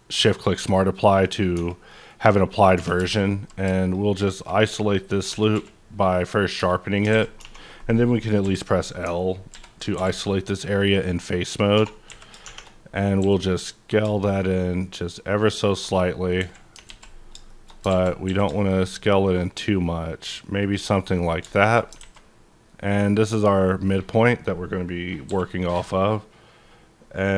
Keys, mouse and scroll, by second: 0.2 shift+click, 0.7 middle click, 1.7 Tab, 1.7 middle click, 2.1-2.7 scroll up 2, 2.7 3, 3.1 alt+click, 3.8 alt+click, 4.2 alt+click, 5.3 Tab, 5.5 q, 6.2 click, 6.6 Tab, 7.4 a, 8.4 l, 9.5 ctrl+i, 9.9 x, 10.6 click, 11.3-11.7 scroll up 1, 11.7-12.1 typing, 12.7 scroll down 2, 13.2 s, 15.4 shift+click, 16.4 KP_7, 16.8 alt+z, 17.2-17.9 scroll up 3, 17.5 shift+middle click, 17.9 alt+z, 18.2 s, 20.6 shift+click, 20.9-21.5 shift+scroll down 1, 21.5 middle click, 21.5 scroll down 1, 21.9 alt+scroll up 1, 22.0 alt+a, 22.2-23.1 alt+scroll down 1, 23.1 scroll down 1, 25.3 k.